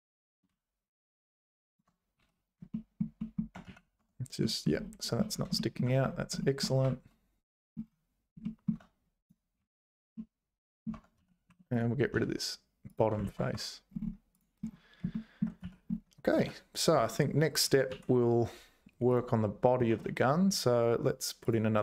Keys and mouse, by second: 2.2 `, 2.9 shift+click, 3.3 shift+click, 3.6 z, 4.0 Tab, 4.4 middle click, 5.6 shift+middle click, 6.4 shift+click, 6.8 `, 8.5 shift+middle click, 9.2 click, 9.6 `, 10.1 middle click, 10.9 Tab, 11.2 z, 11.5 3, 11.8 click, 12.2 x, 13.3 ctrl+s, 13.5 Tab, 15.1 shift+middle click, 15.6 z, 16.4 z, 17.0 `, 17.9 alt+h, 19.9 shift+a.